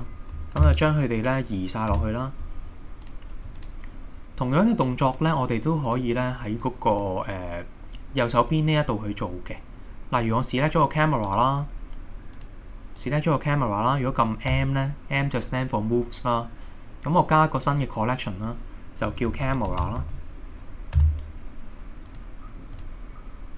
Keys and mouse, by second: 3.1 click, 3.6 click, 7.0 click, 11.3-12.2 right drag, 12.4 click, 13.1 click, 14.6 m, 22.8 click.